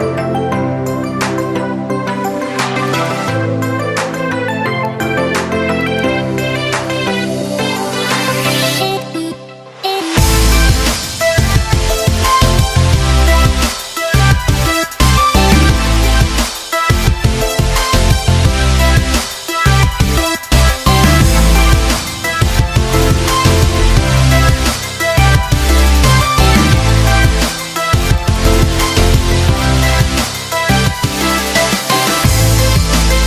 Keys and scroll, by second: 13.6 Escape, 15.8 ctrl+z, 27.1 Escape.